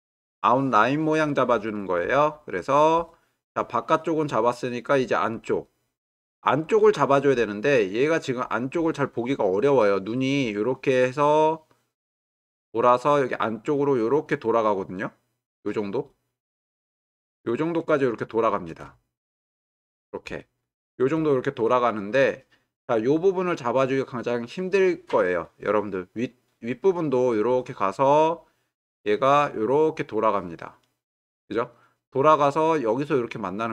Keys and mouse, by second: 8.6-18.6 drag, 20.4 ctrl+middle click, 27.0-33.7 drag.